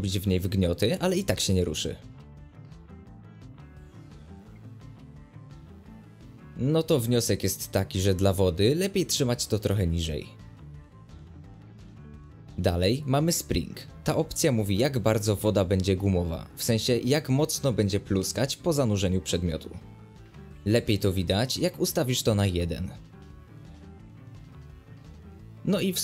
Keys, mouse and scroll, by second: 0.0 space, 0.6 click, 4.2-5.1 middle drag, 5.1 g, 7.0-8.1 middle drag, 8.1 space, 8.7 click, 14.9 middle click, 15.3 space, 15.7 click, 19.8 space, 20.2 click, 22.8 middle click, 23.1 space, 23.7 click.